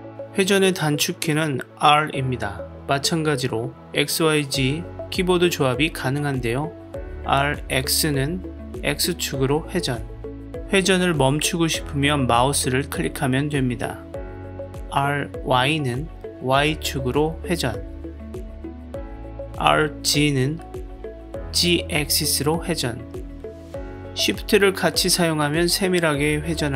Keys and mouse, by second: 1.2 r, 6.7 r, 7.7 x, 14.8 r, 15.9 y, 19.3 r, 20.0 z.